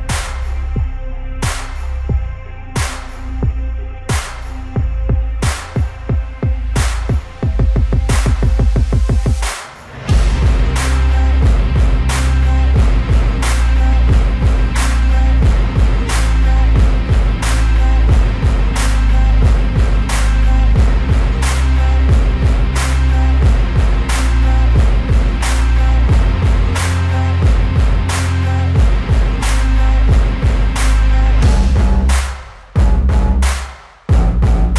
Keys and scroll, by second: 0.1 space, 4.4 space, 5.5 space, 9.6 space, 12.4 space, 12.6 ctrl+-, 12.7 ], 15.4 ], 16.6 space, 16.9 ], 17.1 ctrl+alt+z, 17.4 ctrl+alt+z, 17.6 ], 17.9 space, 22.9 ctrl+alt+z, 23.9 space, 25.6 space, 26.3 space, 26.9 space, 27.2 space, 28.0 ctrl+-, 31.9 space, 34.0 ctrl+alt+z.